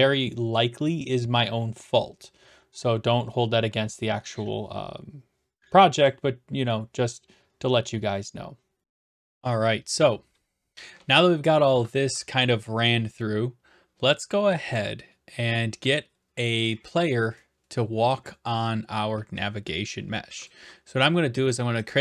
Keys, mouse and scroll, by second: 6.1-7.1 drag, 8.8 click, 20.5 click.